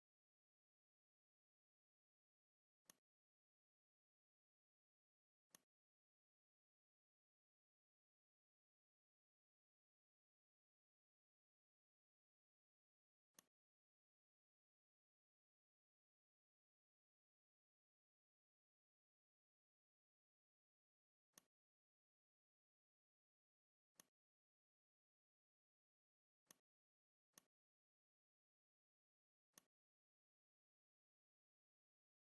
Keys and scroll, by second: 10.9 shift+c, 23.2 z, 23.7 space, 25.1 e.